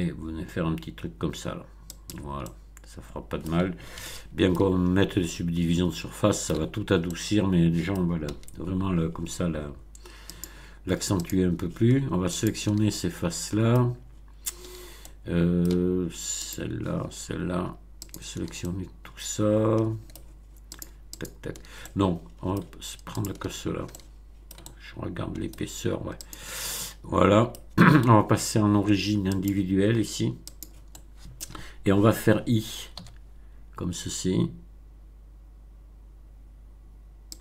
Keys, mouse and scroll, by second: 1.8 click, 2.4-3.6 middle drag, 3.9-4.7 shift+middle drag, 4.8 shift+scroll up 1, 5.2-6.6 middle drag, 7.0-8.1 middle drag, 8.2 a, 10.2 click, 11.2 click, 12.3 shift+click, 12.8-13.9 shift+middle drag, 14.9-15.8 shift+middle drag, 16.4 shift+click, 18.0 shift+click, 18.5-20.3 shift+middle drag, 20.7 shift+click, 21.1 shift+click, 21.7 shift+middle click, 23.1 shift+click, 23.5 shift+scroll down 1, 23.8-25.6 shift+middle drag, 26.2 shift+click, 26.6-27.7 shift+middle drag, 29.3 click, 30.5 click, 30.8-31.5 middle drag, 32.9 i, 37.3 click.